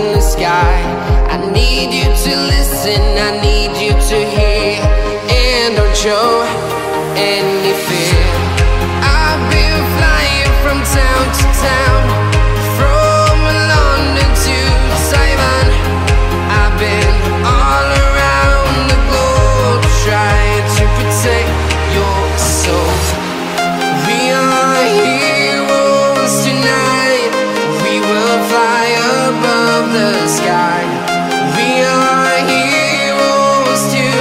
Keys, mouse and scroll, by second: 20.2 right click, 32.0 right click.